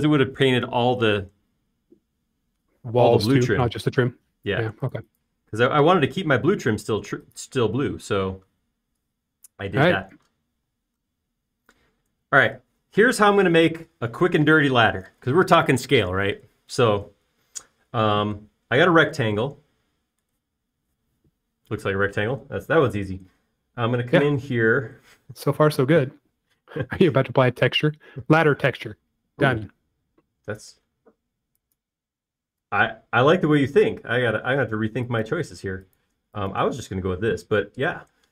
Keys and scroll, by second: 1.3 typing, 7.0 m, 9.0 space, 10.4 typing, 11.7 r, 30.0 r, 36.8 space.